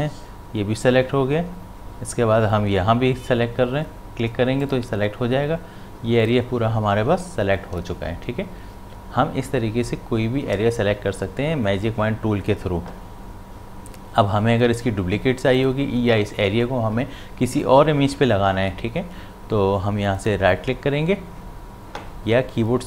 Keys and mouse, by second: 4.6 shift+click, 15.6 click, 20.2 right click.